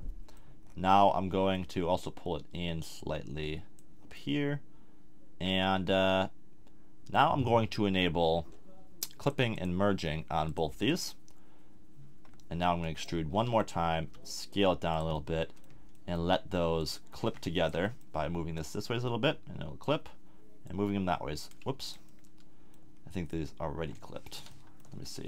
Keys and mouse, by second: 0.6 middle click, 1.1-3.0 middle drag, 3.0-4.9 drag, 4.9-6.1 middle drag, 9.2-12.8 drag, 12.8 middle click, 13.3 e, 13.7-17.3 drag, 14.0 s, 17.8 middle click, 22.1-24.8 middle drag.